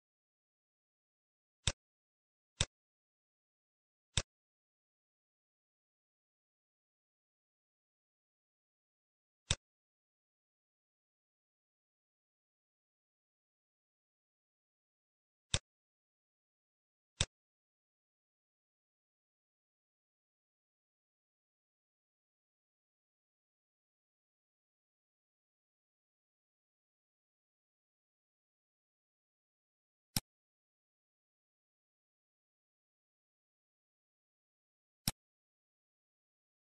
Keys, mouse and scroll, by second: 1.2 click, 1.7 click, 4.1 click, 8.2 middle click, 8.5 scroll up 2, 9.6 click, 10.6 scroll down 4, 10.8 middle click, 11.6 scroll up 2, 12.1 middle click, 12.5 scroll up 1, 14.7 shift+d, 17.2 click, 19.9 click, 22.8 middle click, 23.9-24.6 scroll down 3, 24.6 middle click, 25.6 scroll down 2, 26.3 scroll up 1, 27.0-27.7 scroll up 2, 27.7 middle click, 28.7-29.4 scroll up 4, 29.0 middle click, 30.1 shift+click, 32.4-32.8 scroll down 2, 33.3 middle click, 33.3 scroll down 1, 33.9 middle click, 34.3 scroll up 3, 35.0 shift+click, 36.0 scroll down 3, 36.1 middle click.